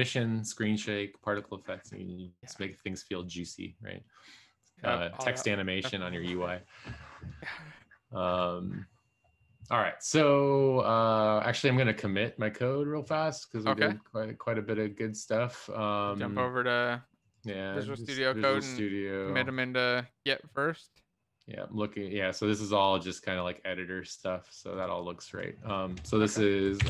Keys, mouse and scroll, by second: 26.7-26.8 typing.